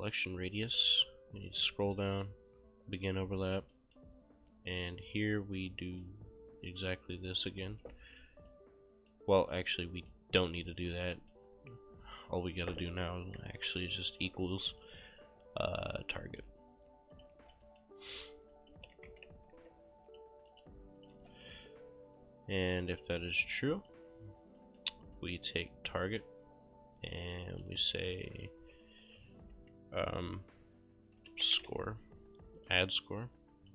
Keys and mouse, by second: 3.1 click, 3.8 right click, 5.3 right click, 6.9 click, 7.8 ctrl+c, 8.0 right click, 9.5 click, 9.8 right click, 12.3 click, 13.5 =, 14.2 click, 15.7 click, 17.2 shift+click, 17.4 q, 17.5 click, 17.7 right click, 18.6 click, 18.6-20.1 typing, 20.1 click, 21.0 shift+click, 21.2 q, 21.4 click, 23.1 right click, 23.8 click, 24.6 right click, 26.1 click, 28.2 click, 28.6 g, 29.6 BackSpace, 31.0-32.2 typing, 32.6 click.